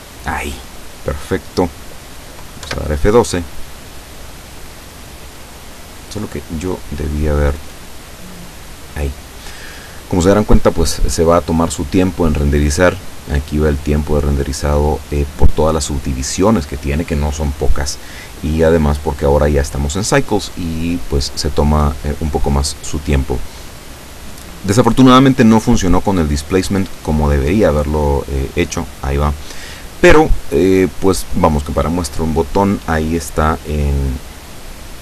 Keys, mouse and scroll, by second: 2.7 F12, 5.0 scroll down 2, 8.0 click.